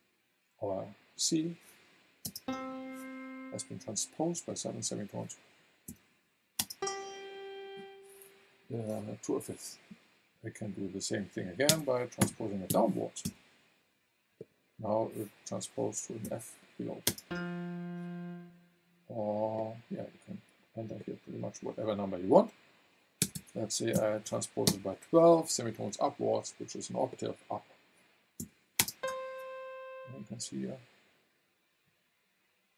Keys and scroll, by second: 2.2 space, 5.9 v, 6.5 space, 11.7 BackSpace, 12.2 KP_Subtract, 12.7 KP_7, 13.2 Return, 16.2 v, 17.0 space, 23.2 BackSpace, 23.9 KP_1, 24.6 Return, 28.4 v, 28.8 space.